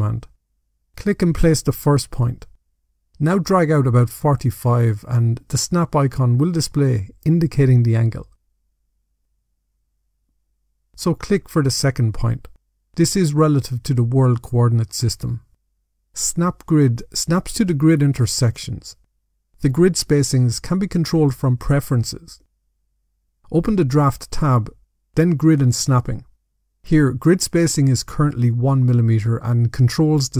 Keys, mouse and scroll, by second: 0.0 click, 1.5 click, 11.9 click, 15.5 click, 16.1 click, 20.6 click, 22.1 click, 24.4 click, 25.8 click.